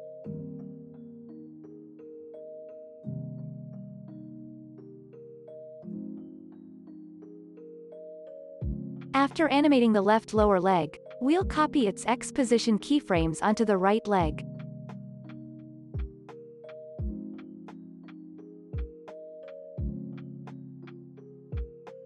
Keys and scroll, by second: 6.5 space, 9.7 space, 10.0 ctrl+s, 11.9 ctrl+s, 14.2 ctrl+c, 16.4 p, 19.8-21.7 typing.